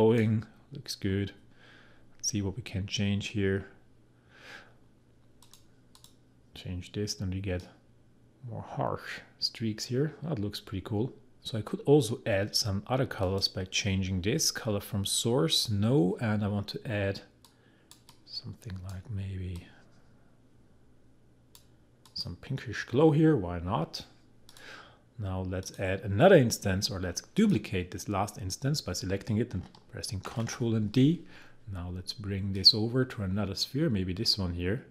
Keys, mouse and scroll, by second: 13.2 click, 15.7-22.0 drag, 24.5 click, 30.3 ctrl+d, 32.5-34.9 drag.